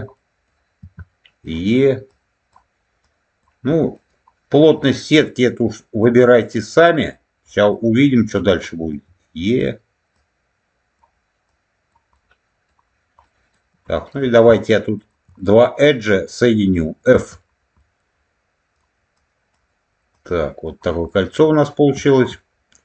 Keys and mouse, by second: 3.8 middle click, 4.6 middle click, 5.5 click, 6.3 middle click, 7.4 middle click, 12.0 middle click, 13.1 middle click, 14.0 click, 14.9 shift+click, 15.3 middle click, 17.0 f, 17.7 middle click, 20.0 click, 21.0-22.1 middle drag.